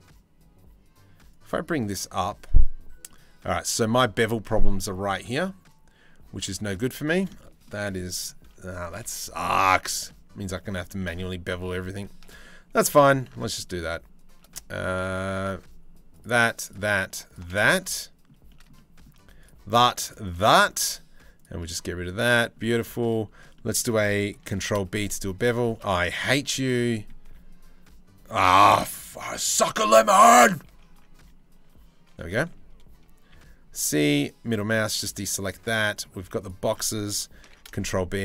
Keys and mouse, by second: 0.9-2.1 drag, 6.6 Tab, 9.6 Tab, 10.1 Tab, 12.9 ctrl+z, 13.2 middle click, 14.1 middle click, 15.8 alt+shift+middle click, 17.2 click, 18.2 click, 18.4 click, 20.0 middle click, 21.3 middle click, 22.4 shift+middle click, 24.1 ctrl+b, 26.0 z, 26.5 click, 26.9 1, 30.3 ctrl+z, 32.9 c, 35.3 click, 35.8 z, 37.0 ctrl+b.